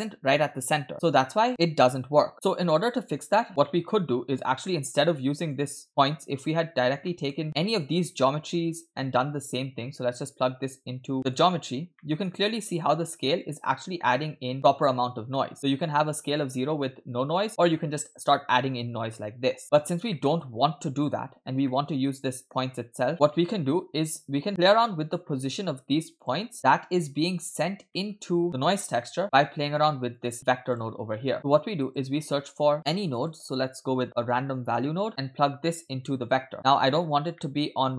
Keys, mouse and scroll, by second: 2.3 middle click, 3.5 scroll down 2, 3.7 middle click, 4.4-4.7 scroll up 2, 4.7 middle click, 5.0-5.5 scroll up 1, 5.5 click, 5.9 middle click, 6.9 scroll down 2, 7.1 middle click, 7.6-11.2 drag, 11.2 middle click, 11.2-11.8 scroll up 4, 12.0 middle click, 13.6-19.6 shift+drag, 19.7-20.1 scroll down 2, 20.1 middle click, 21.4 scroll down 2, 21.7 middle click, 23.1 click, 27.4 click, 27.9 middle click, 28.1-28.6 scroll up 4, 28.5 click, 29.0 middle click, 29.2 scroll up 1, 29.4 middle click, 30.1-30.7 drag, 31.2 middle click, 31.4 shift+a, 35.3-36.4 drag, 37.0-37.4 scroll up 2, 37.4 middle click.